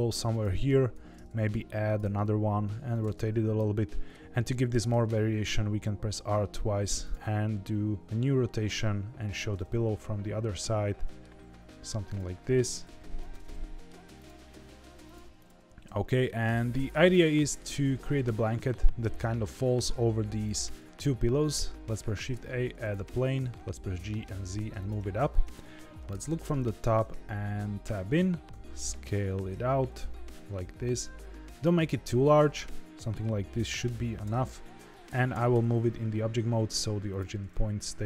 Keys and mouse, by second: 0.9 alt+d, 2.0 r, 3.1-4.1 middle drag, 4.8 r, 7.1 r, 9.5-11.2 middle drag, 11.3 g, 12.8 r, 13.4-13.8 middle drag, 14.5 g, 15.4 shift+click, 15.6 g, 17.3 middle drag, 19.3 s, 20.8 middle click, 21.9 shift+a, 23.1 g, 26.0 KP_7, 27.1 Tab, 28.4 s, 33.5 Tab, 33.9 g, 35.0 ctrl+z, 35.3 g, 37.5-38.0 middle drag.